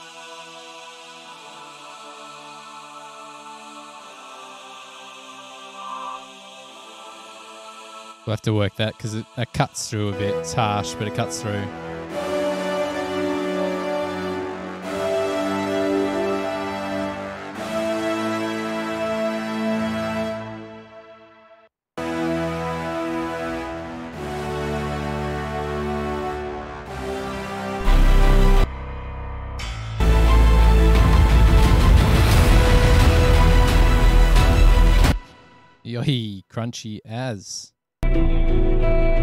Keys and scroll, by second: 21.9 space, 22.1 space, 34.3 super+=, 35.3 space, 38.2 space.